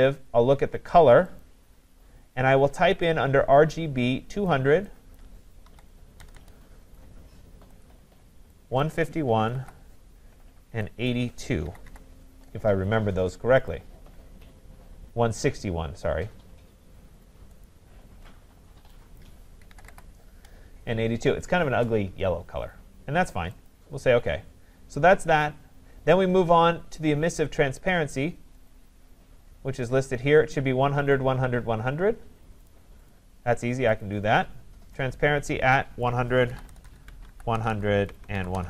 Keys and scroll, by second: 37.0 Tab.